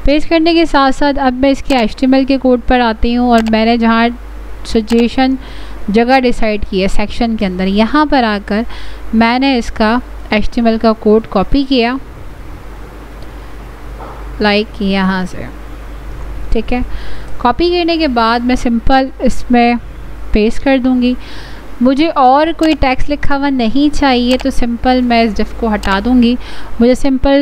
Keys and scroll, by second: 17.0 ctrl+c, 20.3 ctrl+v.